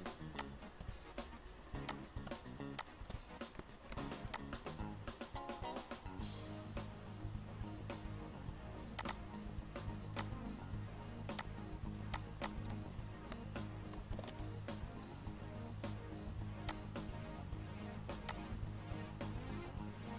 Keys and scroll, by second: 3.7 c, 4.0 e, 14.0 ctrl+g, 15.0 p.